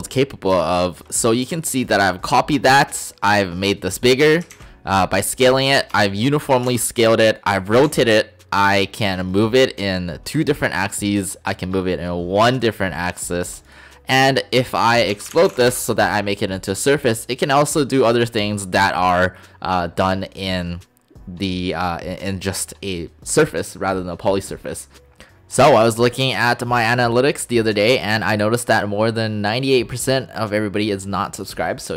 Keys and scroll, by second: 4.5 ctrl+z, 6.7 ctrl+shift+z, 7.8 ctrl+z, 14.9-15.6 typing, 15.7 Return, 24.9 '.